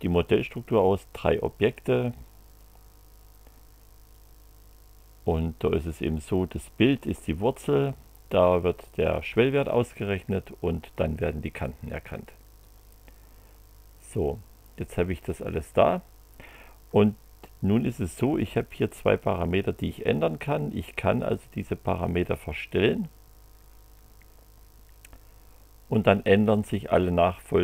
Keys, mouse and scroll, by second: 2.6 click, 4.1 click, 12.6-15.4 drag, 22.0-26.5 drag.